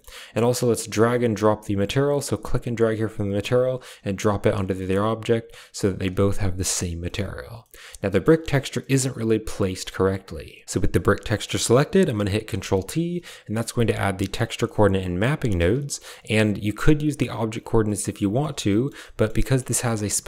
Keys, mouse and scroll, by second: 0.8 click, 4.3 click, 4.7 shift+middle click, 5.6 click, 6.5 shift+middle click, 6.9 shift+middle click, 7.5 middle click, 8.7-9.8 middle drag, 10.6 click, 11.3 middle click, 12.4 ctrl+t, 12.6 middle click, 12.9 a, 13.4 click, 14.3 click, 15.0 click, 15.1 g, 15.5 a, 15.8 middle click, 17.0 click, 17.7-18.3 middle drag, 18.7 shift+click, 19.0 click, 19.3 shift+click.